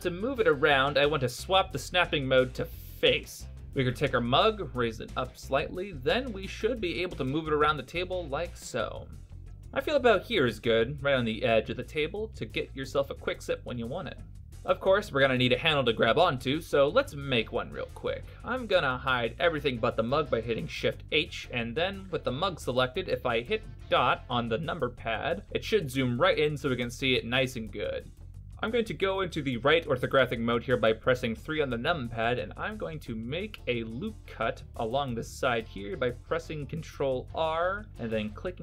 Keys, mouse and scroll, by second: 1.4 click, 4.2 click, 5.4 g, 7.8 g, 13.2 middle click, 14.3 alt+middle click, 21.3 shift+h, 22.5-23.8 scroll up 7, 23.8 KP_Decimal, 26.1 KP_Decimal, 27.2-28.4 scroll down 3, 27.7 middle click, 31.5 KP_3, 33.6 ctrl+r, 33.6 Tab, 35.0 ctrl+r.